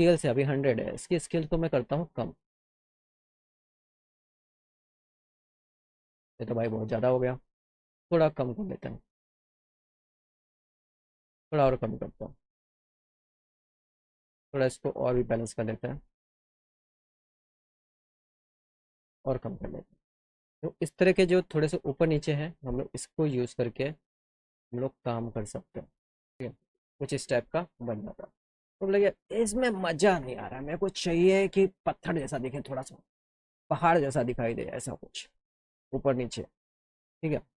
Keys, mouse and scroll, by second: 1.3 click, 5.4 click, 7.8-9.0 drag, 10.3 click, 11.6 click, 14.2 click, 16.3-17.4 drag, 18.8-19.9 drag, 23.5-25.1 drag, 25.7 click, 36.5 click, 37.4 click.